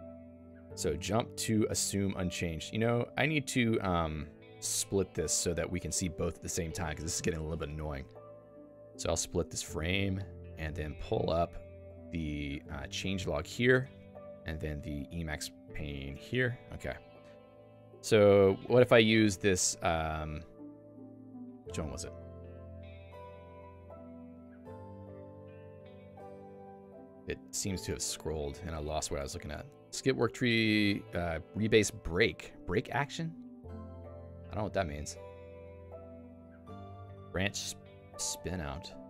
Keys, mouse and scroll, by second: 4.5 click, 5.3 click, 14.5 click, 16.3 Return.